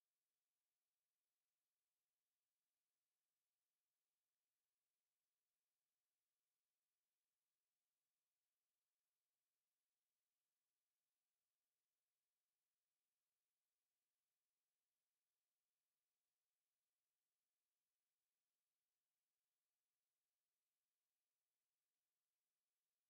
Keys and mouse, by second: 5.3 ctrl+space, 7.9 click.